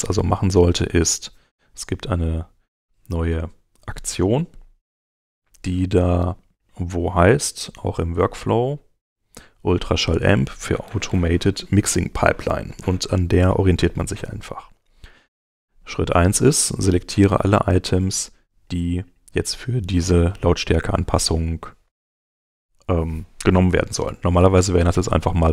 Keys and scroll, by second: 24.1 alt+-.